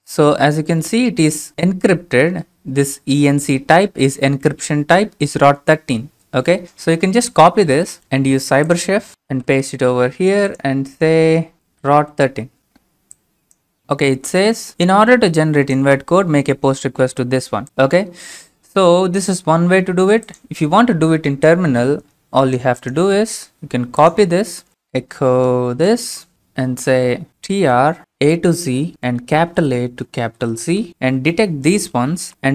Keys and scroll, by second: 9.4 ctrl+v, 11.5-13.1 typing, 24.7 typing, 25.7 ctrl+v, 26.1-32.5 typing.